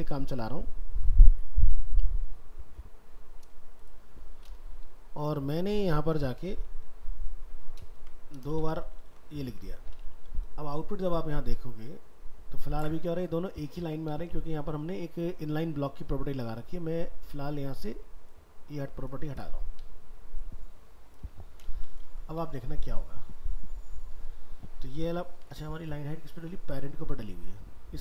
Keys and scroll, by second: 7.9 ctrl+c, 8.5 ctrl+Return, 8.6 ctrl+v, 9.5 alt+Tab, 14.2 alt+Tab, 22.0 ctrl+s, 22.5 alt+Tab.